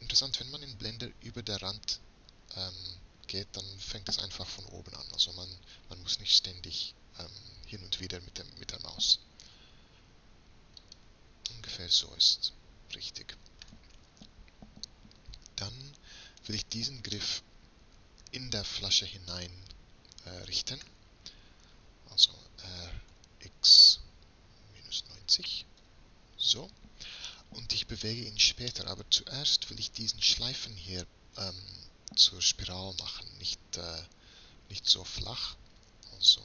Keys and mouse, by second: 12.3 middle click, 12.6 middle click, 13.5 middle click, 14.1 middle click, 15.1 middle click, 16.5 click, 17.5 middle click, 22.3 r, 29.0 click, 34.1 middle click, 34.7-36.4 middle drag.